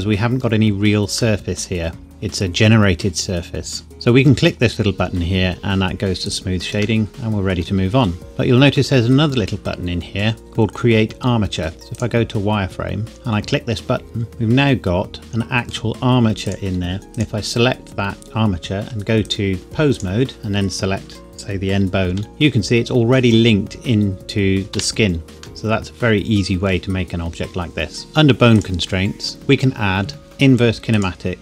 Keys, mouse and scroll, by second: 3.9 click, 6.3 click, 7.0 middle click, 11.7 z, 11.9 click, 14.3 middle click, 16.5 click, 17.2 click, 21.8 click, 22.1 g, 24.8 Escape, 25.6 middle click, 27.4-28.1 scroll up 1, 28.1 click, 30.9 click.